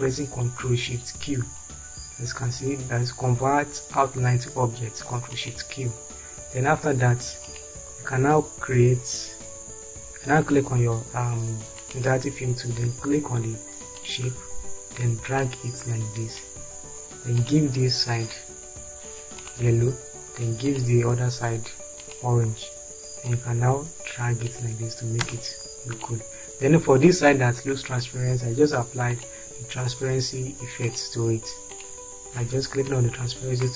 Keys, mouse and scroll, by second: 25.4 space.